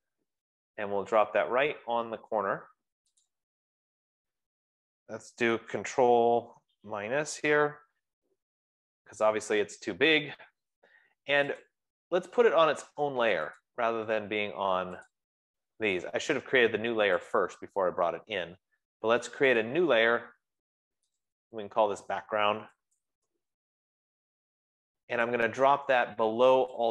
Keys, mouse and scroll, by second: 3.7 click, 7.6 ctrl+-, 8.3 ctrl+-, 8.6 ctrl+-, 9.2 ctrl+-, 12.0 click, 13.9 click, 15.3 click, 17.7 click, 20.1 click, 21.8 click, 23.1-25.1 typing.